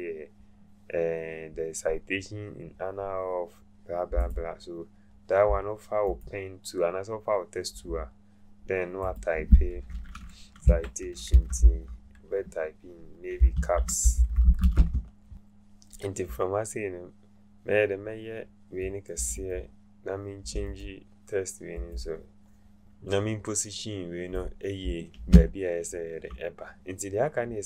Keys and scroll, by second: 10.7 Caps_Lock, 11.3 c, 11.6 i, 13.1-15.1 typing.